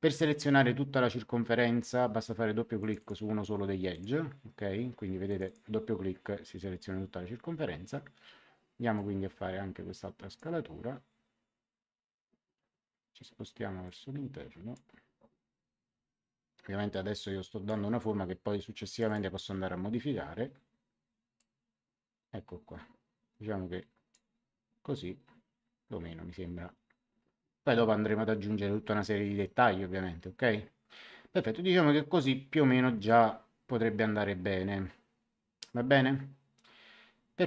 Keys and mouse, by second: 2.7 click, 5.2 click, 8.9 click, 13.8 click, 16.8 click, 18.7 click, 21.3 click.